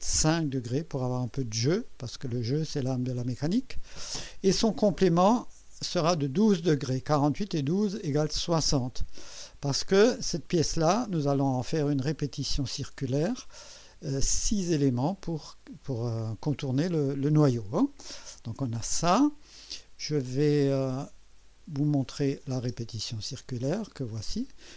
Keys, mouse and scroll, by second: 22.0 click, 22.6 space, 23.7 click, 24.3-24.7 drag.